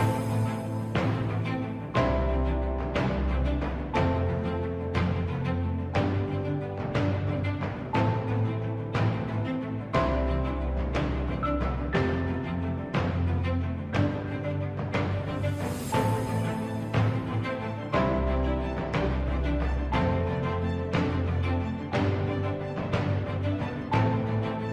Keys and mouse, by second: 0.7 s, 6.4 shift+middle click, 7.9 click, 10.1 i, 17.2 s.